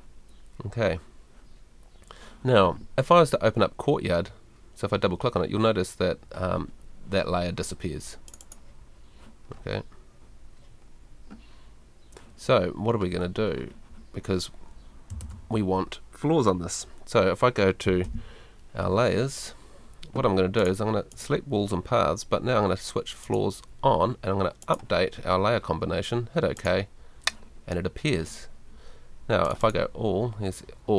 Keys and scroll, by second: 18.0 super+l.